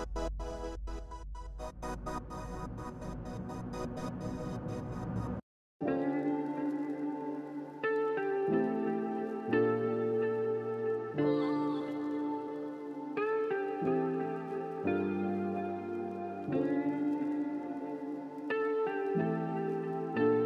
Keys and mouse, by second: 0.0 Tab, 0.1 click, 1.9 click, 2.9-4.7 drag, 4.9 alt+click, 5.7 click, 5.9 Tab, 6.8 click, 7.1 g, 8.1 click, 8.2 g, 9.1 g, 10.2 click, 10.4 ctrl+z, 10.6 click, 10.8 g, 11.5 Tab, 11.8-13.5 alt+drag, 14.5 click, 16.1-17.1 drag, 19.3 drag, 20.3 click.